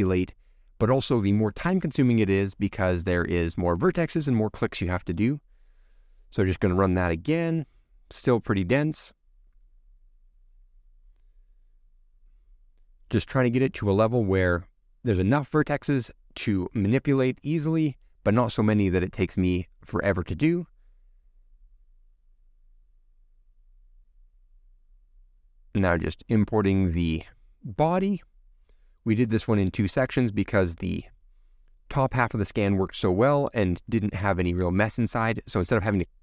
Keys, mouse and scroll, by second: 1.1 click, 1.3-1.9 scroll up 4, 2.3 middle click, 3.2 click, 3.5-4.1 scroll up 13, 4.1-4.7 scroll down 1, 4.7-5.1 scroll down 1, 5.1-6.9 middle drag, 6.9-7.2 scroll down 5, 7.2 middle click, 7.9-9.2 scroll up 7, 9.2 click, 10.6-13.5 drag, 14.8 click, 15.2 scroll down 6, 15.5-16.5 middle drag, 16.5-17.0 scroll up 4, 17.0-17.4 scroll down 2, 17.4 shift+middle click, 18.4-19.1 scroll down 1, 21.6 click, 26.5 scroll down 1, 26.7 middle click, 26.9-27.4 scroll up 1, 27.4 click, 27.7-28.2 scroll down 6, 28.2 click, 29.9 click, 30.4 click, 31.4 click, 31.6 middle click, 33.0 click, 33.3 click, 33.9 middle click, 34.1 click, 34.4 click, 34.8 middle click, 35.2 click, 35.7 middle click, 35.9 scroll up 6, 36.0 click.